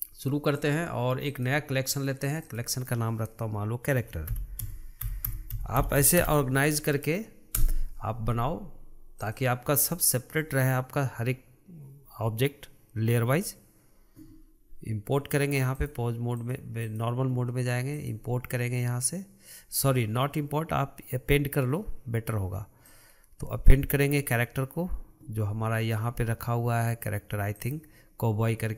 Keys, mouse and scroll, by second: 0.7-2.3 right drag, 2.3-5.6 drag, 9.3 click, 15.8-17.0 drag, 18.0-21.1 drag.